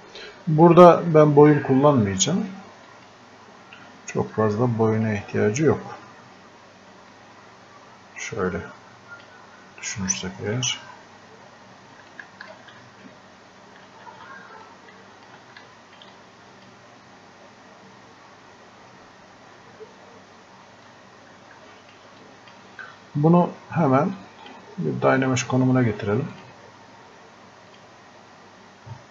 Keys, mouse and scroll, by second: 10.8-11.2 scroll up 1, 12.1 alt+click, 13.8 ctrl+z, 14.6-18.9 drag, 20.7 alt+click.